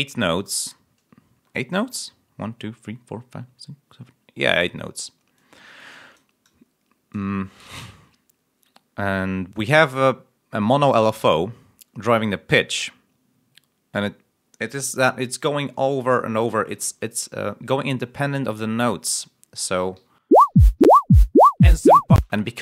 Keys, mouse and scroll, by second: 1.7 click, 5.3 click, 19.9 l, 22.1 space.